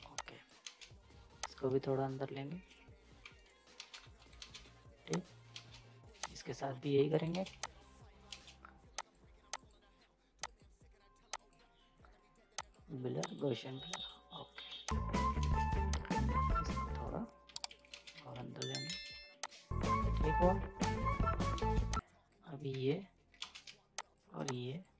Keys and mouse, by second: 0.0 z, 0.2 click, 0.2 click, 0.6 space, 1.4-3.2 drag, 3.2 z, 3.3 right click, 3.7 ctrl+space, 4.0 z, 4.1 right click, 4.4 ctrl+space, 4.6 z, 5.1 click, 5.5 space, 6.2 click, 7.0 z, 7.1 right click, 7.5 z, 7.6 click, 8.3 ctrl+space, 8.9 click, 14.7 z, 14.9 click, 15.4 ctrl+space, 15.9-17.5 drag, 17.5 z, 17.9 space, 18.1 z, 18.6 right click, 19.1 z, 19.5 click, 20.3 right click, 20.8 click, 21.5 ctrl+space, 22.0 click, 22.7 ctrl+z, 23.4 ctrl+space, 24.0 shift+click.